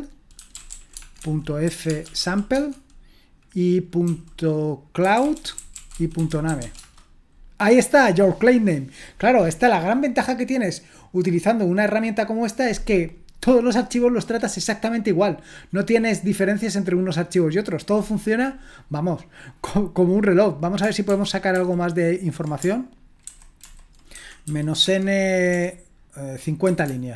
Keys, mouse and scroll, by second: 0.0-2.7 typing, 4.8-7.1 typing, 9.5-21.0 drag, 21.0 ctrl+p, 21.5 ctrl+p, 23.2 alt+b, 23.6 alt+b, 24.1-27.1 typing.